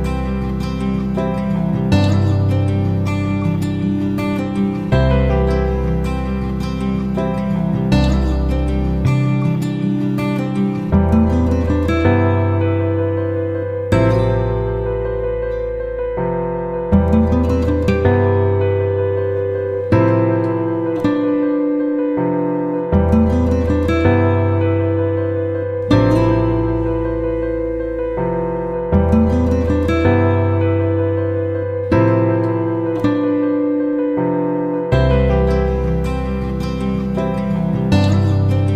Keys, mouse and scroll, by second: 11.0-38.6 drag.